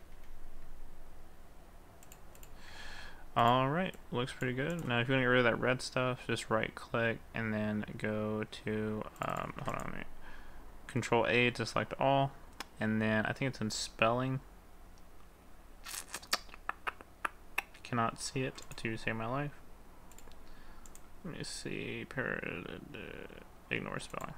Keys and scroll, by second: 0.2 ctrl+s, 9.6 ctrl+a.